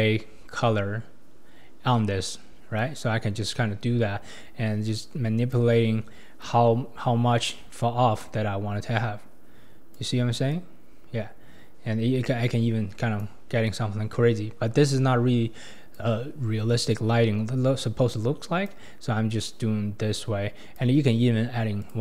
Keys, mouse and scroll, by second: 2.8-5.8 drag, 6.4-9.4 drag, 10.5-13.5 drag, 13.6-16.8 drag, 16.9-22.0 drag.